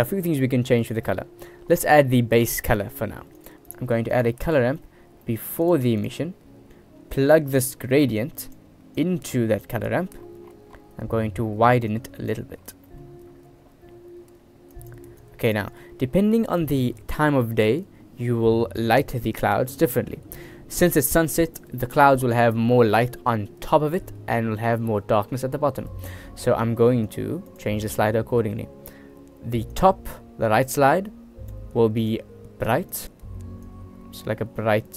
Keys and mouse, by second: 3.4 shift+a, 4.1 shift+a, 8.4 click, 9.1-10.0 drag, 12.1 click, 13.0 click, 13.0 right click, 14.9 click, 15.3 click, 15.8 click, 21.8 middle click, 24.0 click, 24.2 middle click, 25.7 middle click, 26.1 shift+middle click, 27.2 click, 27.6-29.8 middle drag, 29.8-31.6 drag, 31.6 middle click, 32.1 click, 32.2-34.9 middle drag.